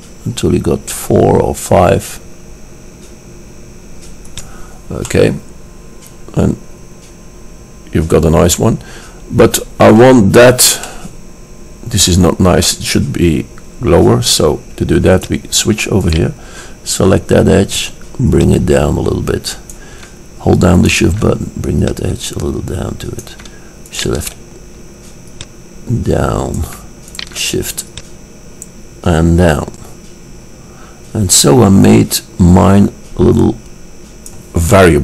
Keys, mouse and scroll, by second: 5.3-7.9 middle drag, 11.0-13.0 middle drag, 15.3-17.1 drag, 16.3-17.1 right drag, 17.1-18.2 middle drag, 18.4-20.4 drag, 20.9-22.0 middle drag, 22.0 click, 22.0 right click, 22.6 middle click, 23.0-23.8 drag, 23.8-24.1 scroll up 1, 24.1-25.4 drag, 25.4 middle click, 26.2-27.3 drag, 27.3-30.0 middle drag, 34.8-35.0 middle drag.